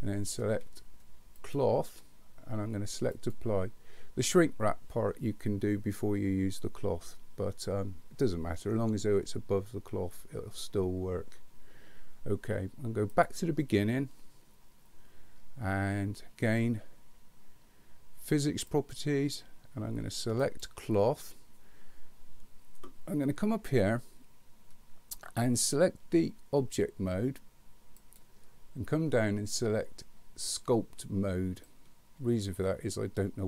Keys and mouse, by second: 1.4-3.4 drag, 18.8 click, 20.6 click, 28.1-33.4 drag.